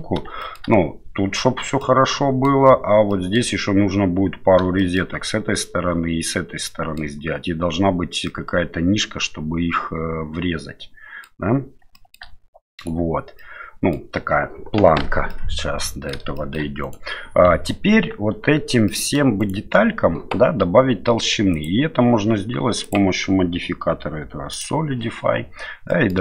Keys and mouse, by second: 0.4 shift+middle click, 1.8 middle click, 3.1 middle click, 4.8 shift+middle click, 6.6 middle click, 8.2-11.4 middle drag, 11.9 shift+middle click, 12.8 right click, 13.4 middle click, 15.3 middle click, 16.3 shift+middle click, 16.8 right click, 18.3 Tab, 18.9-19.2 middle drag, 19.4 right click, 21.5 click, 22.9-24.6 drag, 25.9 middle click.